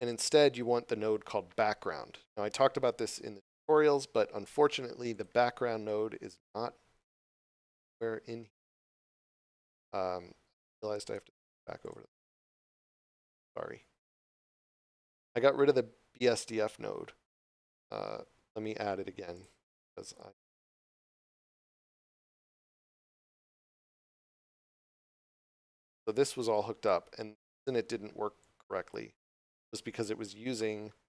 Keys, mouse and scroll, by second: 11.0 click, 19.3 click, 25.4 click, 30.6 shift+middle click.